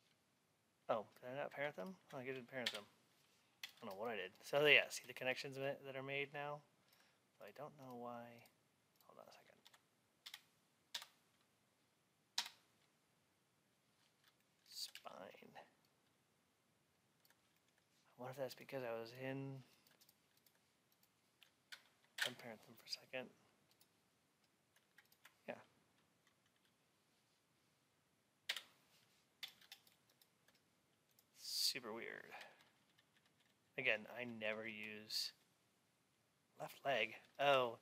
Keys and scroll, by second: 9.5 Up, 32.5 Down, 32.9 Left.